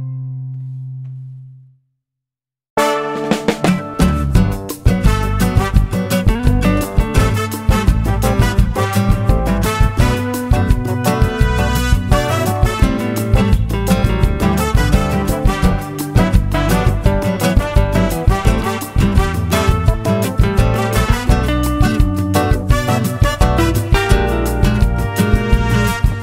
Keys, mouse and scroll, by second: 2.3 click, 3.7 click, 7.5 shift+click, 8.0 shift+click, 8.3 shift+click, 9.9-11.1 shift+drag, 11.2 shift+click, 12.3 ctrl+shift+z, 14.1-15.1 ctrl+shift+drag, 15.2 ctrl+shift+click, 16.2 shift+click, 16.6 shift+click, 17.4 shift+click, 18.3 shift+click, 19.7 shift+click, 20.0 shift+click, 20.7 shift+click, 21.4 shift+click, 21.8 shift+click, 22.5 shift+middle click, 23.8 shift+click, 24.6 shift+click, 25.2 shift+click, 25.6 shift+click, 26.1-26.2 shift+drag.